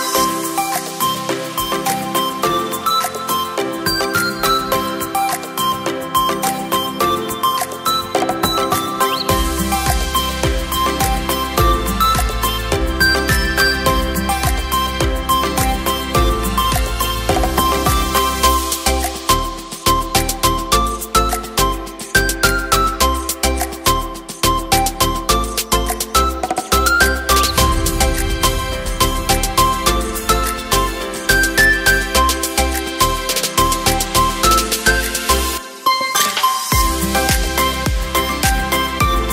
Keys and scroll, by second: 6.9 space, 8.9 t, 11.4 m, 23.0 KP_8, 24.9 v, 28.1 w, 28.2 w, 31.8 typing, 36.5 KP_1.